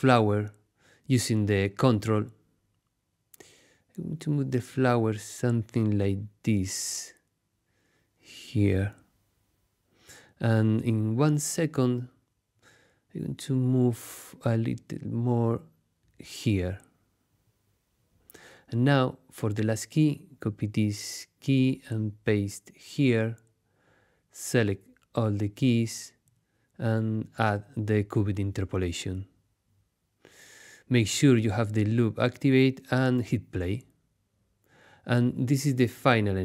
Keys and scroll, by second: 19.2 super+c, 21.6 super+v, 31.9 space.